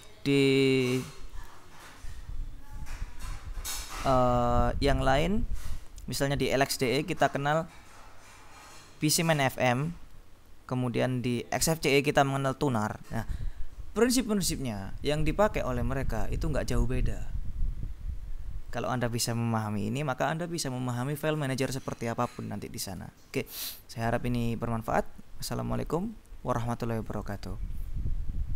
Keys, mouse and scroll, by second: 27.4 click.